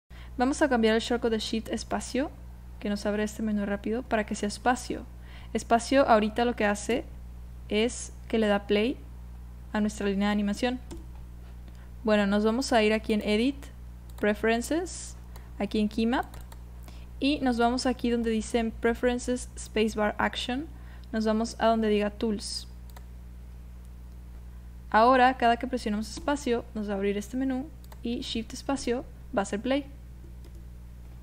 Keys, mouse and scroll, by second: 1.8 shift+space, 6.9 space, 10.9 space, 13.1-14.4 drag, 24.3 click, 24.3 space, 26.2 space, 27.9 click, 28.7 shift+space, 30.5 space.